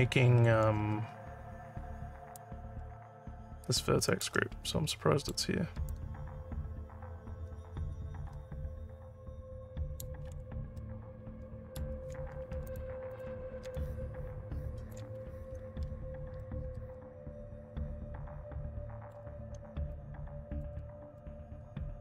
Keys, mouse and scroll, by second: 2.3-4.2 ctrl+drag, 4.9 alt+middle click, 5.8-9.9 alt+drag, 10.3 alt+middle click, 10.7 alt+middle click, 12.6 click, 13.1 click, 13.7-14.9 alt+drag, 16.3-19.1 alt+middle drag, 19.9 shift+click, 21.2-22.0 alt+middle drag.